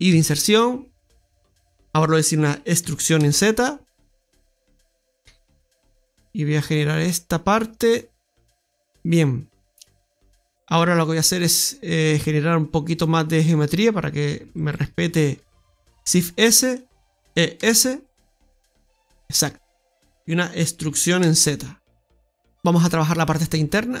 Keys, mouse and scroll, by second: 0.1 i, 1.6 middle click, 2.8 e, 11.0 right click, 12.8 click, 14.1 right click, 14.5 alt+shift+right click, 16.0 shift+s, 17.3 e, 19.5 middle click, 22.4 right click, 22.6 Tab, 23.3-23.7 scroll up 3.